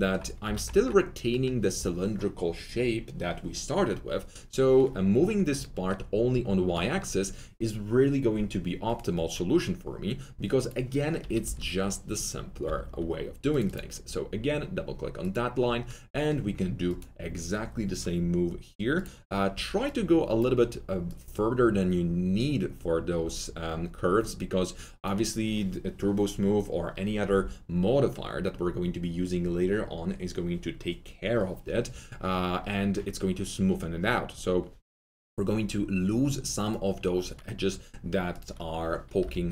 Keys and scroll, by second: 0.4 alt+F3, 11.1 F3, 11.4 F3, 11.6 F4, 12.6 2, 19.5 1, 39.1 F3.